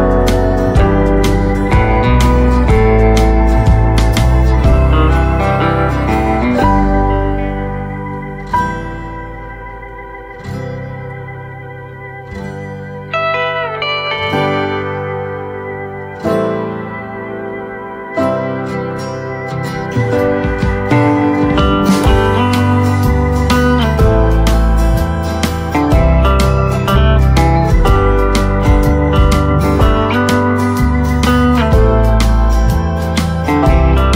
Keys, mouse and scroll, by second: 0.8 click, 3.1 shift+click, 3.3 shift+right click, 3.9 click, 7.3 right click, 7.8-9.9 drag, 9.9 scroll down 1, 10.7 right click, 11.2 click, 13.1-14.0 typing, 14.5 right click, 16.0 click, 16.8 shift+click, 18.0 Return, 20.1 click, 20.5-20.9 scroll down 1, 20.9 right click, 22.6 click, 23.2 right click, 23.9-24.4 scroll down 1, 24.4-29.3 right drag, 29.3 click.